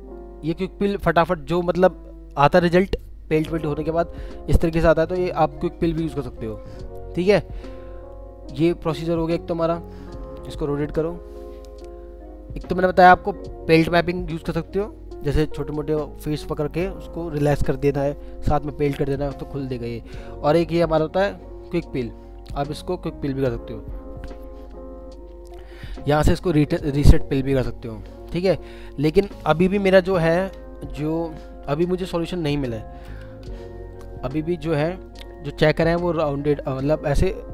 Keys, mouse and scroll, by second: 7.8 scroll up 1, 11.1 typing, 32.8-33.5 typing, 35.0 middle click.